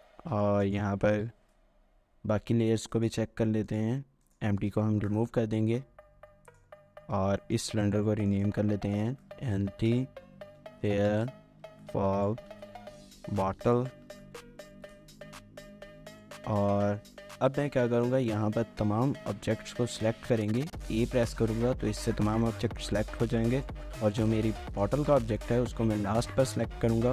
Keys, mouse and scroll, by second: 1.0 scroll down 1, 4.9 Delete, 7.1 Delete, 7.4 shift+middle click, 8.5 double click, 8.7-14.6 typing, 14.8 Return, 16.9 scroll down 2, 17.1 shift+middle click, 18.0-20.8 scroll down 1, 20.8-24.3 scroll, 24.3 a, 24.7 shift+click.